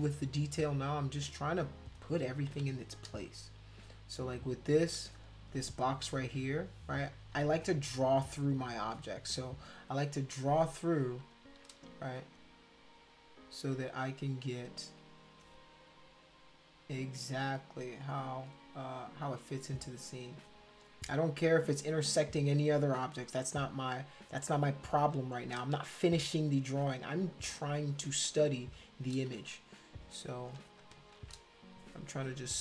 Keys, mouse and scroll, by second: 0.3 click, 2.5 ], 4.0 click, 6.2 click, 7.2 ctrl+z, 9.0 click, 9.5 click, 11.2 shift+click, 12.2 click, 14.3 shift+click, 15.1 click, 16.8 shift+click, 17.6 shift+click, 18.8 click, 19.4 shift+click, 20.1 click, 20.8 shift+click, 21.5 click, 21.8 shift+click, 24.2 click, 25.1 shift+click, 27.6 click, 28.2 shift+click, 29.3 ctrl+z, 30.1 click, 30.8 ctrl+shift+click.